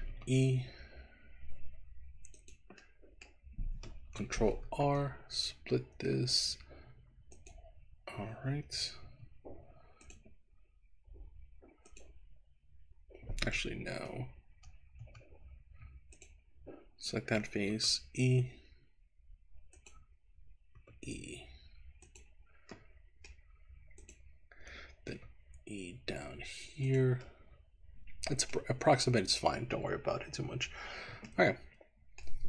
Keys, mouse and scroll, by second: 0.2 e, 2.5 click, 2.9 middle click, 4.6 ctrl+r, 9.1 Escape, 10.0 click, 11.8 click, 13.9 ctrl+z, 14.6 ctrl+z, 16.1 click, 17.8 e, 19.8 click, 20.7 e, 22.0 click, 22.7 middle click, 24.0 click, 25.3 e, 26.9 click, 27.3-28.6 middle drag, 31.3-32.3 middle drag.